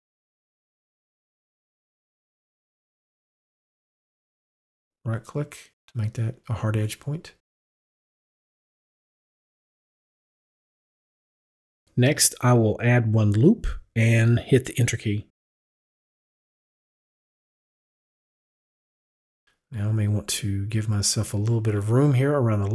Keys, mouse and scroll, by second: 5.4 right click, 8.1 click, 13.4 click, 15.7 right click, 16.9 right click, 19.7 right click, 20.8 right click.